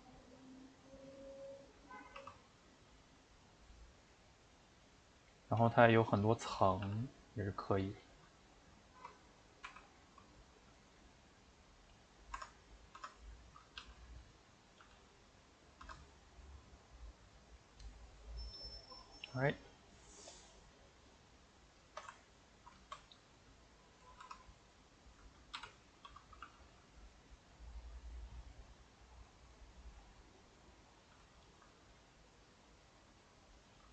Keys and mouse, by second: 0.2-2.2 middle drag, 2.2 shift+d, 4.7 middle click, 5.6 s, 6.4 middle click, 6.8 g, 8.3 middle click, 9.0 s, 9.6 r, 10.8-13.0 middle drag, 13.0 Tab, 13.5 click, 13.8 g, 14.6 click, 14.8 g, 15.9 Tab, 16.2-20.3 middle drag, 20.3 click, 20.5-24.3 middle drag, 24.3 Tab, 25.4 click, 25.5 l, 25.8 middle click, 26.4 g, 31.3-32.6 shift+middle drag, 32.6 click, 32.8 middle click, 33.5 click.